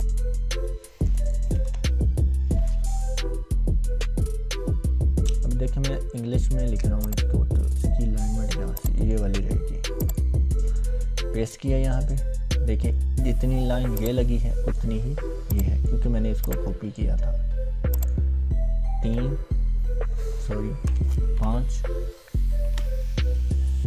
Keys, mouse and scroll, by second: 1.4 BackSpace, 7.0-8.0 drag, 11.3 ctrl+v, 14.3-14.9 drag, 16.7-17.1 drag, 19.0 l, 20.8 BackSpace, 21.3 5, 22.6 ctrl+v.